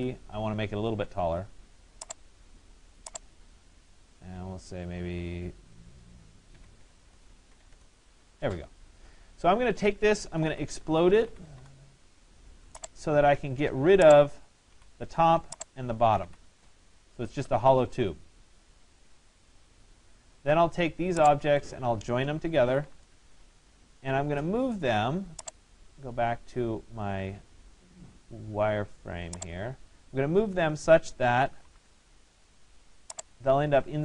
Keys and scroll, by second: 6.2 6, 14.8 Delete, 22.7 Return, 31.4 Return.